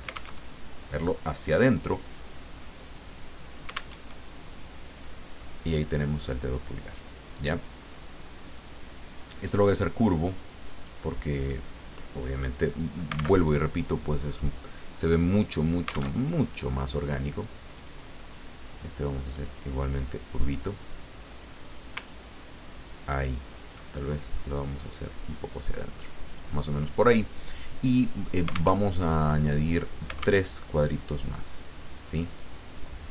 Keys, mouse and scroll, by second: 0.4 ctrl+alt+Tab, 3.9 alt+Tab, 5.0-7.3 drag, 8.4 click, 10.2 click, 13.4 alt+Tab, 16.1 alt+Tab, 17.7 click, 19.2 click, 21.5 click, 22.0-23.8 ctrl+drag, 24.8-26.6 drag, 28.2 click, 28.8 alt+Tab, 30.4 alt+Tab.